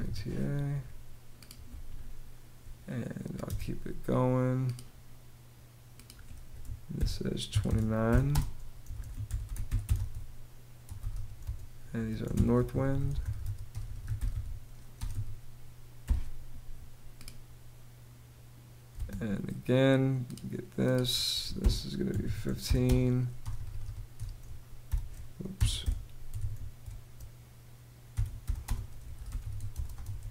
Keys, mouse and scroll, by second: 0.0-0.1 typing, 3.0 space, 6.5-14.7 typing, 15.7 ', 18.5 space, 20.9-23.0 typing, 24.4-30.3 typing.